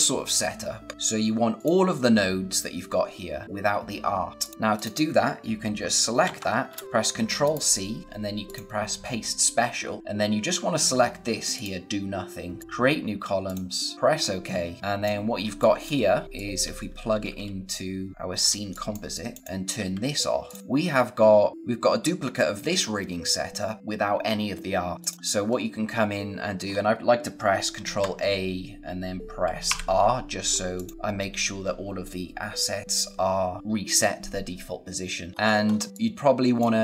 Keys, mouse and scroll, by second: 1.5 click, 4.3 click, 6.2 ctrl+c, 6.6 space, 6.8 click, 7.3 right click, 8.4 click, 11.4 click, 14.1-14.6 scroll down 1, 14.6 scroll up 1, 14.8 click, 15.4 space, 15.5 click, 18.1 space, 18.2 scroll down 1, 18.4 space, 18.6 click, 18.9 space, 19.0 click, 19.7 d, 20.4 click, 24.9 click, 25.1 scroll down 1, 25.9-26.6 scroll down 1, 26.6 scroll up 1, 27.7 ctrl+a, 29.6 r, 30.3-30.7 scroll down 1, 30.7 click, 35.3-35.8 scroll up 1, 35.8 space, 36.7 scroll down 1.